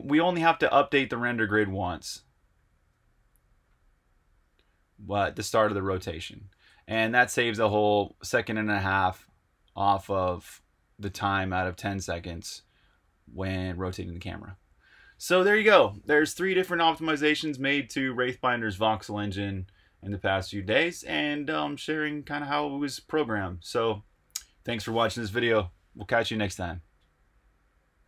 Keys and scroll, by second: 0.3-0.8 typing, 2.7 r, 4.3 r, 5.1 r, 5.7 r, 6.8 super+q, 6.8 typing, 7.8 super+Tab.